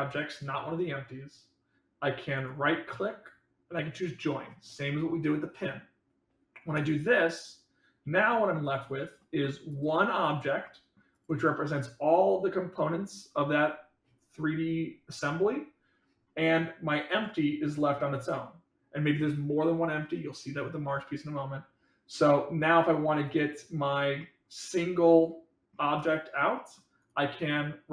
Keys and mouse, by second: 2.3-9.1 right drag, 9.1-9.4 middle drag, 10.6-10.9 middle drag, 11.4-12.7 middle drag, 17.2 click, 24.1-25.7 middle drag, 25.9 click, 26.5 middle click.